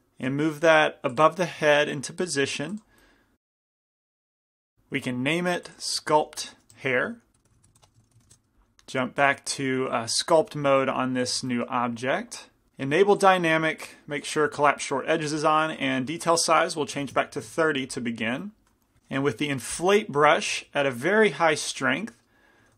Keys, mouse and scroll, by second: 0.4 g, 1.4-4.3 drag, 1.7 g, 3.2-4.2 middle drag, 3.8 g, 5.8-7.6 drag, 6.7 s, 7.6 BackSpace, 8.3 BackSpace, 9.4-11.2 drag, 10.9 middle click, 10.9 right click, 11.2 f, 11.5-12.7 drag, 11.5-12.7 middle drag, 11.5-12.7 right drag, 13.3-18.2 drag, 17.7 middle click, 17.7 right click, 18.5 middle click, 19.6 i, 20.7 shift+f, 22.1-22.7 middle drag.